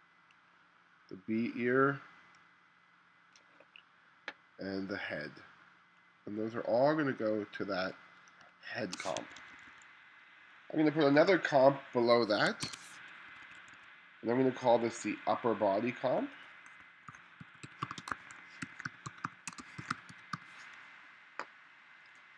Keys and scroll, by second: 8.5 space, 9.3 1, 11.2 2, 12.7 super+v, 13.3 2, 16.9-20.9 typing.